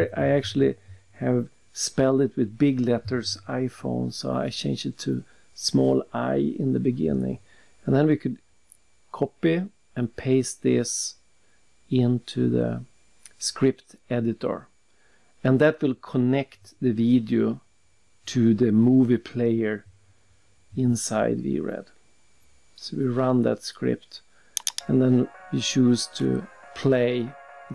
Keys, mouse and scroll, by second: 0.3 typing, 1.3 click, 2.1 click, 3.8 click, 5.0 click, 5.6 click, 7.2 ctrl+alt+c, 7.9 alt+Tab, 8.9 click, 9.5 click, 11.8 click, 13.9 click, 15.0 right click, 16.1 click, 21.5 click, 23.5 click, 24.6 click, 24.7 click, 27.5 click.